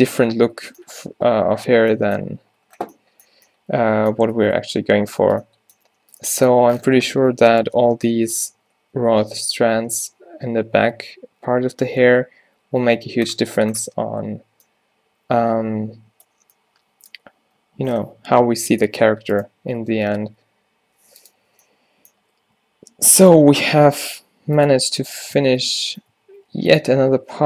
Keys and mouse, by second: 5.8-6.8 middle drag, 12.0-13.4 middle drag, 13.8-19.7 middle drag, 19.7 Tab, 20.4 r, 21.5 o, 22.3 g, 24.4 r, 24.8 g, 25.4 Tab, 26.2 Tab, 26.5 g, 27.0 r.